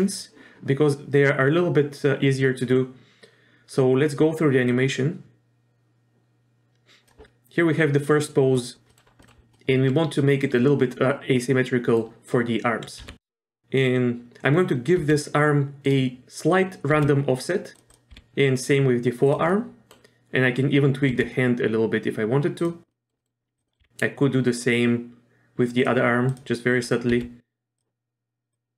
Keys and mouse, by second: 4.8-7.1 drag, 8.1-8.5 middle drag, 8.9 middle click, 9.2 middle click, 9.5-11.9 middle drag, 13.0 r, 15.0 r, 16.9 r, 18.1 r, 19.5-19.9 middle drag, 21.1 r, 22.9 middle drag, 23.2 middle click, 23.7 middle click, 23.8 r, 26.3 click, 26.8 click, 27.1 r, 28.5-28.7 drag.